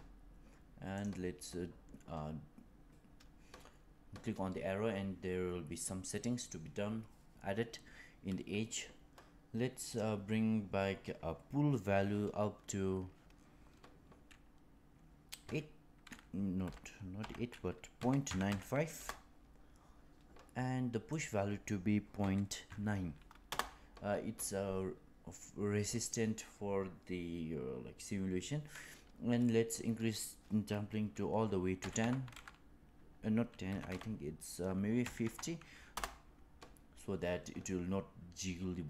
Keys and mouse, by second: 0.9 click, 9.8-20.6 drag, 21.0-24.7 drag, 29.7-37.3 drag, 33.8 BackSpace.